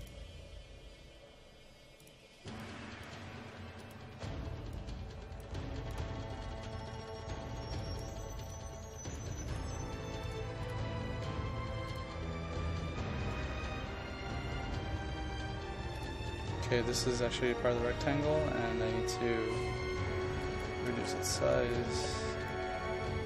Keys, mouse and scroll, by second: 3.2 KP_5, 3.9 click, 5.6 KP_5, 6.0 click, 8.1 KP_0, 8.6 click, 9.4 KP_1, 9.5 KP_2, 9.8 KP_5, 10.3 click, 20.7-22.1 typing, 21.6 click, 22.5 click.